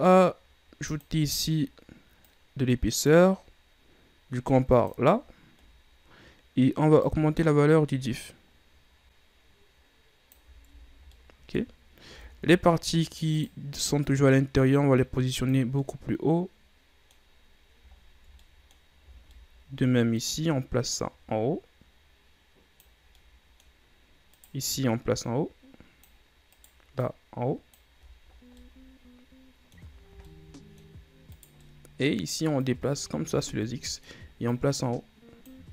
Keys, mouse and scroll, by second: 0.9 click, 2.3-5.0 drag, 5.3-7.2 scroll down 8, 7.2-10.2 shift+drag, 10.9-11.2 ctrl+scroll down 3, 11.2-11.9 middle drag, 11.9-12.2 scroll up 1, 12.2 Tab, 12.7 scroll down 1, 12.9 scroll up 2, 13.5 right click, 14.2-15.9 drag, 15.9-18.0 middle drag, 18.0-18.5 ctrl+scroll up 5, 18.5 middle click, 19.2 shift+scroll down 3, 19.4 middle click, 20.2 right click, 21.0-23.1 drag, 23.1 scroll down 3, 23.3 middle click, 23.9-24.4 scroll up 3, 24.4 right click, 25.3-26.6 drag, 26.6 right click, 27.1-28.1 drag, 28.1-28.7 ctrl+scroll down 9, 28.7-30.1 middle drag, 30.1 shift+scroll down 4, 30.4-31.4 middle drag, 31.4 right click, 31.7-32.8 middle drag, 32.8-33.8 drag, 33.8 middle click, 34.6-35.7 drag.